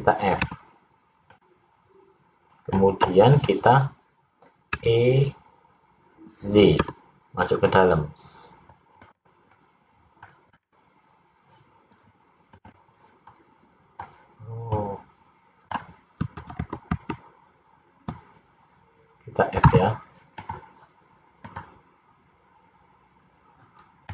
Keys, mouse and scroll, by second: 0.6 f, 1.4 middle click, 4.9 e, 9.6 middle click, 10.7-12.2 scroll up 3, 12.7 click, 13.4 middle click, 14.9 click, 16.6 ctrl+z, 16.8 ctrl+z, 17.1 ctrl+z, 19.8 f, 20.5 click, 21.6 click.